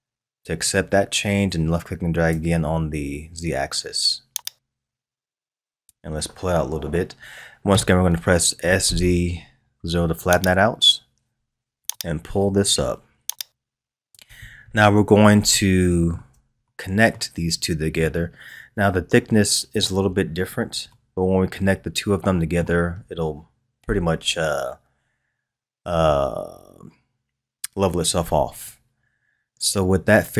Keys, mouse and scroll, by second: 4.4-7.5 drag, 8.6 s, 11.9-14.4 drag, 14.4-15.5 scroll up 3, 15.5-20.0 shift+middle drag, 20.0-20.9 scroll down 3, 20.9-23.9 middle drag, 28.7-30.3 scroll up 2.